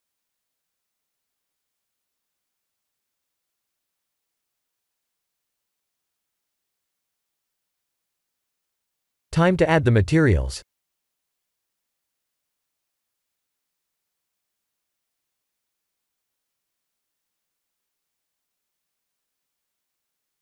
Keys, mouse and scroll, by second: 0.2-0.9 scroll down 8, 0.9 middle click, 6.0 middle click, 8.2-9.0 scroll down 1, 9.0 middle click, 9.6 click, 11.6 click, 12.5 click, 13.3 click, 17.0 click, 17.6 middle click, 18.6-19.9 scroll up 5, 20.0 click.